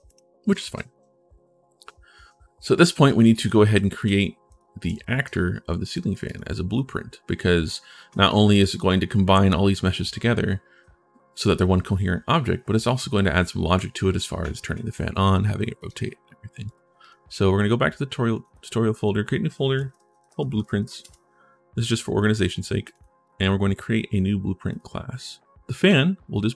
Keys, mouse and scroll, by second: 2.8-5.0 right drag, 3.3-5.1 typing, 5.6 right click, 6.0 click, 8.3 click, 8.5 click, 8.7 w, 15.5 click, 16.4 click, 16.8 click, 18.1 click, 18.2 right click, 18.7 click, 19.8-21.1 typing, 22.2 click, 22.3 click, 22.6 click, 24.5 click, 25.5 click.